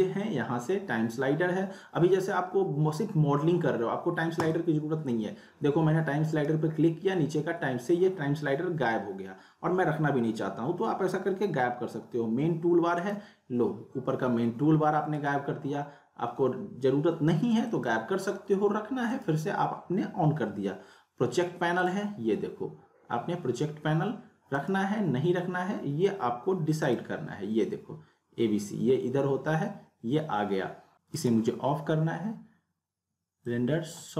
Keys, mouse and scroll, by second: 4.4 click, 6.3 right click, 13.0 click, 15.1 right click, 17.7 click, 19.1 right click, 19.1 right click, 21.8 click, 24.6 right click, 26.8 click, 30.9 click, 31.1 right click, 33.4-34.1 drag.